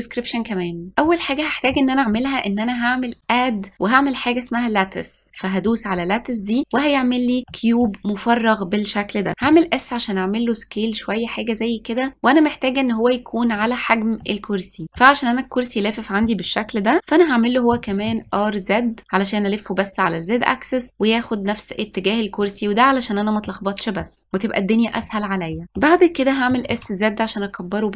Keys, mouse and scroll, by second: 0.0 click, 3.0-5.8 drag, 7.4 scroll down 1, 7.6-9.6 middle drag, 9.6 s, 14.3-17.0 middle drag, 17.8 r, 23.6-26.6 middle drag, 26.6 s.